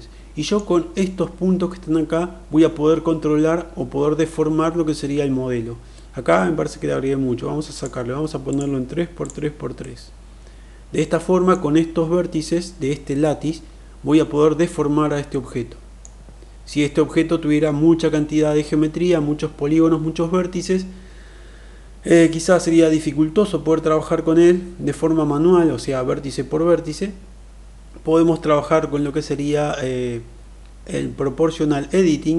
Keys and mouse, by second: 7.8 click, 8.5 click, 9.2 click, 9.8-11.5 middle drag, 15.3-16.0 middle drag.